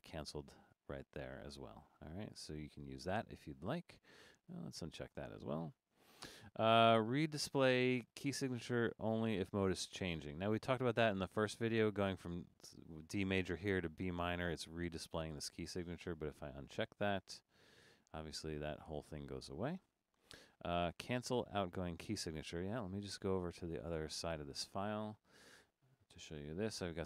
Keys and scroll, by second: 26.3 super+-.